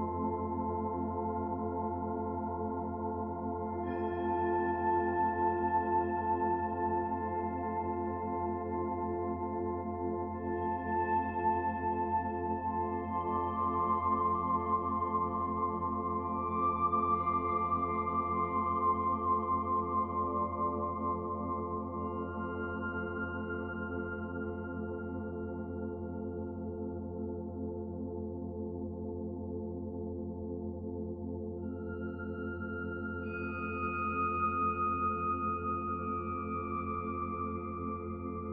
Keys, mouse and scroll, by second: 2.6 click, 10.0 click, 13.5 click, 15.7 click, 18.1 scroll up 1, 18.7-21.2 scroll up 2, 21.2 click.